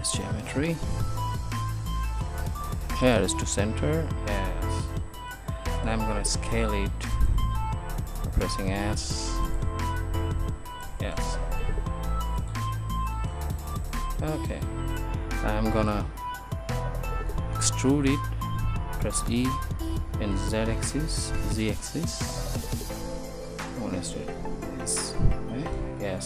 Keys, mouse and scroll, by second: 2.0 shift+s, 6.6 s, 8.5 s, 11.5 s, 19.6 e, 23.9 click, 24.2 Tab.